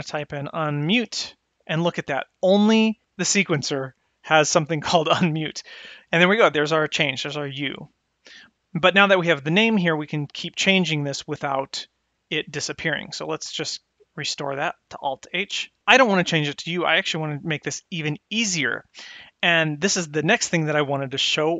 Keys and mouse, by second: 13.6 click.